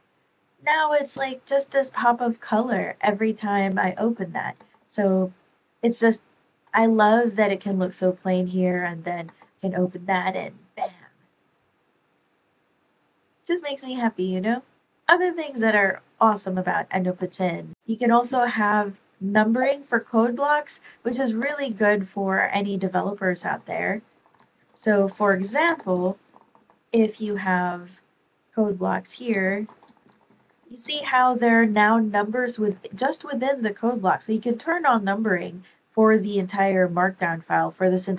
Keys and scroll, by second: 4.6 ctrl+super+l, 9.2 ctrl+super+l, 21.0 ⟲, 23.4 ctrl+super+l, 23.8-26.6 typing, 29.3 Return, 29.3-31.0 typing.